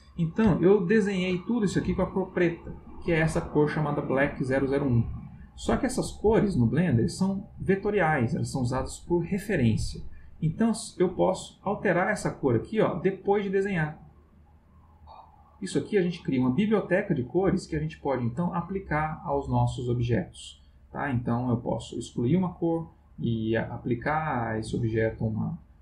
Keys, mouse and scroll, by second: 0.6 ctrl+middle click, 11.2 click, 12.4 click, 14.6 click, 16.2 click, 21.9 click, 23.2 click, 24.0 click, 24.6 click.